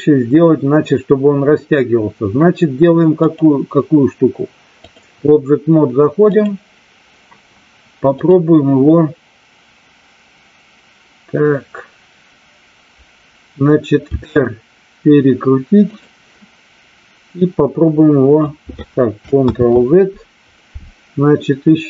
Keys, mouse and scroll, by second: 3.1-4.9 drag, 6.1 click, 8.1 click, 14.0 r, 15.9 click, 17.4-18.4 drag, 19.4 ctrl+z.